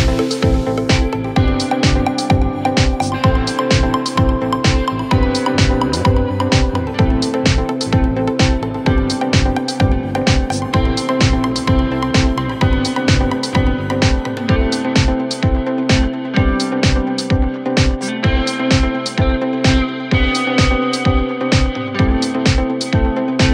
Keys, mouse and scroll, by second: 18.8 ctrl+t.